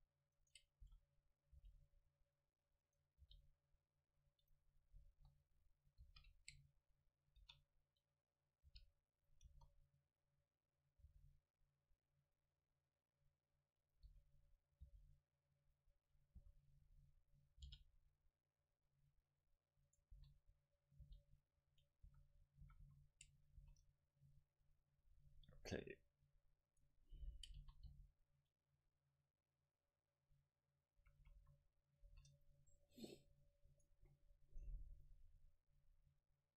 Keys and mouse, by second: 0.4 right click, 0.9 s, 1.5-3.4 drag, 1.5 right click, 1.6 g, 2.9-5.1 right drag, 3.2 g, 4.6-6.4 drag, 5.1 KP_7, 6.1 shift+d, 6.6-8.3 drag, 7.5 r, 8.7 g, 9.3-11.1 drag, 9.5 KP_0, 11.1 g, 14.0-16.4 drag, 14.1 s, 14.9 g, 16.4 s, 17.7 g, 19.9-21.8 right drag, 20.2 s, 21.1 g, 22.0-23.6 drag, 22.1 a, 22.7 a, 22.9 a, 23.6 ctrl+s, 26.8-30.1 right drag, 27.6 s, 31.0-32.7 drag, 31.0 a, 31.3 a, 31.4 a, 32.1 ctrl+s, 33.8-35.7 right drag, 35.0-36.5 drag.